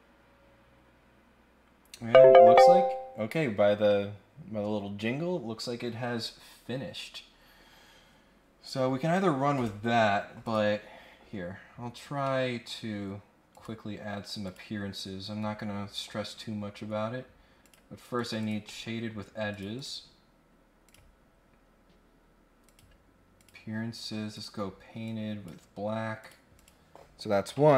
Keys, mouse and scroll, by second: 9.5 click, 10.4 click, 11.7-12.1 scroll down 2, 12.1 scroll up 1, 12.2 scroll down 1, 13.5 click, 14.4 click, 17.6 click, 18.2 click, 18.4 click, 18.6 scroll up 1, 18.9-19.5 scroll down 1, 19.5 click, 19.7 click, 20.8 click, 22.6 click, 23.4 click, 24.3 click, 25.0 click, 26.2 click, 26.5 click.